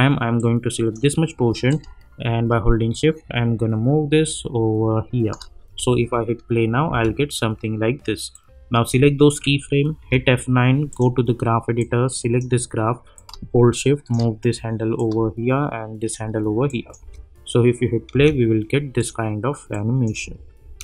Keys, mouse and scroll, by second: 0.3-5.7 drag, 5.7 space, 8.3-10.0 drag, 10.0 F9, 10.9-16.7 drag, 17.0 space, 19.0 click, 20.2 space.